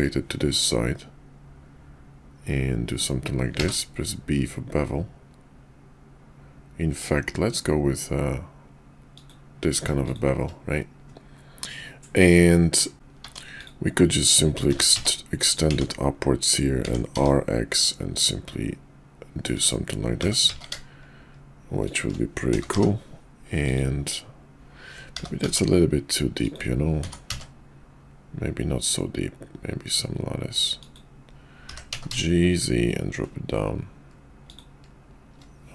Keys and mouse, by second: 12.5 middle click, 13.2 Tab, 13.6 click, 14.6 g, 15.7 Tab, 16.8 r, 20.1 g, 22.5 g, 25.0 g, 26.9 r, 31.6 g.